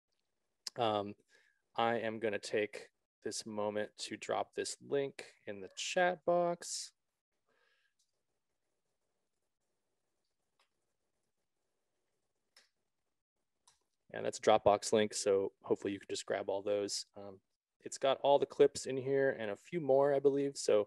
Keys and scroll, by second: 6.6 shift+f, 6.9 shift+t, 7.2 shift+a, 7.5 shift+e, 8.8-13.0 typing, 13.3 ctrl+v, 14.1 Return.